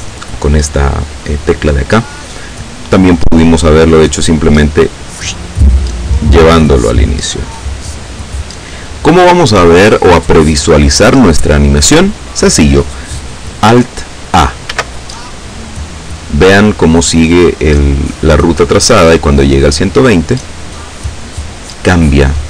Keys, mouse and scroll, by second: 3.5 click, 4.4-8.5 drag, 13.8 alt+a.